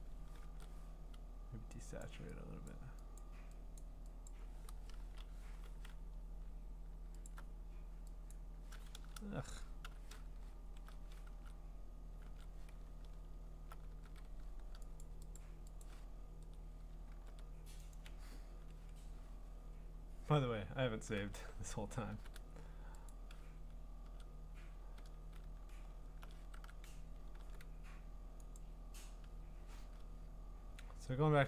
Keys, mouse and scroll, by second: 0.4 ctrl+u, 2.0 click, 2.7 click, 3.2 click, 3.8 click, 4.3 click, 5.0 Return, 5.4 b, 7.3 alt+click, 8.3 click, 8.9 ctrl+z, 9.8 u, 10.5 scroll up 6, 11.3 ctrl+Tab, 12.2 ctrl+Tab, 12.9-15.0 scroll, 13.9 ctrl+w, 15.0 click, 15.4 click, 15.8 click, 17.1 ctrl+w, 17.9 click, 21.2 ctrl+Tab, 22.1 ctrl+w, 23.1 click, 24.0 ctrl+Tab, 25.6-26.0 scroll, 26.5 ctrl+Tab, 27.4 ctrl+w, 28.6 click, 30.5-31.4 scroll.